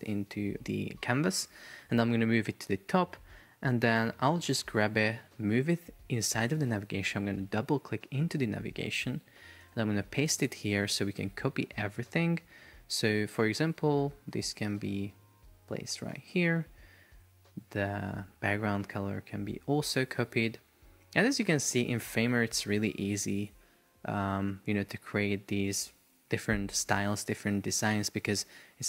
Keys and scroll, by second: 4.8 super+x, 9.7 super+v, 14.4 super+x, 16.0 shift+super+v.